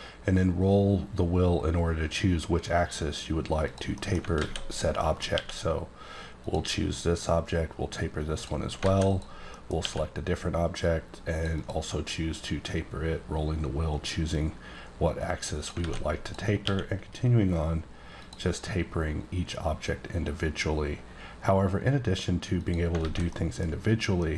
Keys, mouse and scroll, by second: 0.4-2.2 scroll down 1, 3.7 click, 3.9 middle click, 4.4 alt+a, 4.6 click, 4.9 middle click, 5.3 q, 6.4 click, 8.3 click, 8.8 alt+a, 9.1 click, 9.5 middle click, 9.8 q, 10.8 click, 11.5 double click, 12.6-14.4 scroll down 1, 15.6 click, 15.8 alt+a, 16.2 click, 16.6 q, 18.2 click, 19.2-20.7 scroll down 4, 22.6 click, 23.2 a, 23.2 middle click, 24.0 scroll down 1, 24.1 middle click.